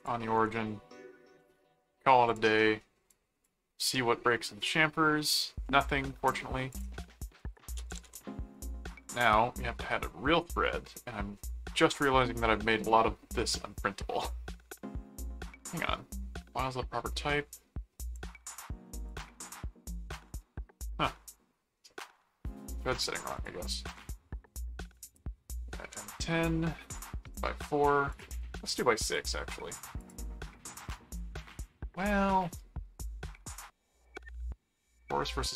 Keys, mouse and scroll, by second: 0.3 right click, 1.4 middle click, 2.3 click, 3.1 click, 4.8 middle click, 5.6 middle click, 6.7 click, 7.1-8.5 typing, 9.2 Return, 18.1 click, 23.3 click, 25.4-26.4 typing, 27.3 click, 28.1 click, 29.0 click, 30.0 click.